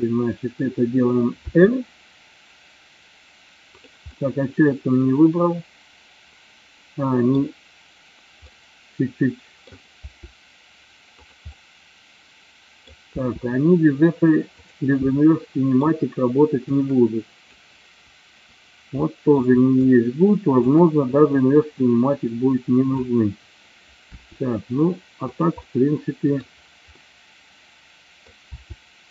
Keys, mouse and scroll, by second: 1.4 r, 3.8 click, 4.3-7.5 middle drag, 8.5-9.8 middle drag, 10.0 r, 11.3 click, 11.6-13.0 middle drag, 13.2 r, 14.8 click, 15.4 middle click, 16.8-17.6 drag, 19.2 middle click, 20.0-20.8 shift+drag, 21.9-23.0 drag, 24.2 r, 25.4 click, 25.6-26.4 middle drag, 27.0-28.3 middle drag, 28.6 r.